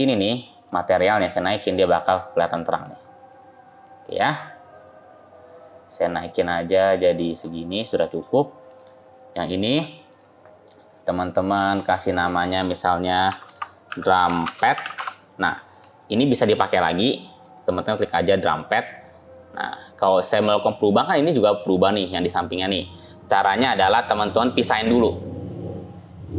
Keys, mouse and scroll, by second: 0.5 click, 1.3 click, 7.5 click, 7.8 middle click, 8.5 click, 10.0 click, 16.4 click, 17.7 click, 23.5 ctrl+z, 24.0 click.